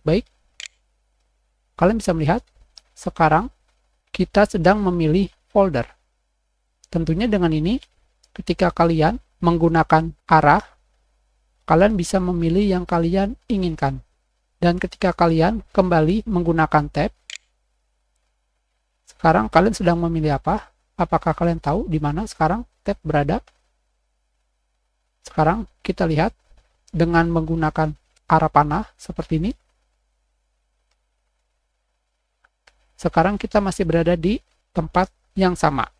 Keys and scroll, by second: 16.4 Escape, 16.5 Tab, 17.2 Tab, 19.2-20.0 typing.